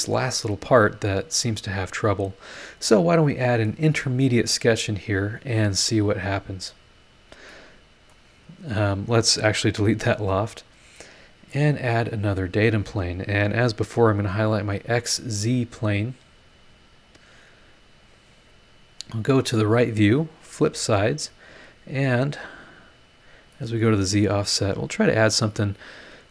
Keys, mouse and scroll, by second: 6.8 click, 7.5 middle click, 7.6 click, 7.6 right click, 8.8 click, 9.7 Delete, 10.5 scroll down 2, 12.4 click, 16.9 click, 18.0 click, 19.5 click, 20.8 click, 22.4-26.3 drag.